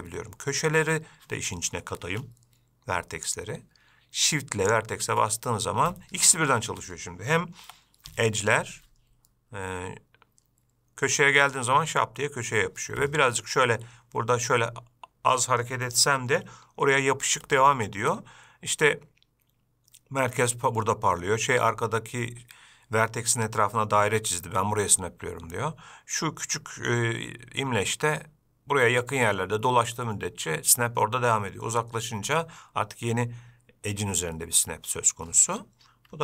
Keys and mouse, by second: 3.4-5.3 drag, 7.8 g.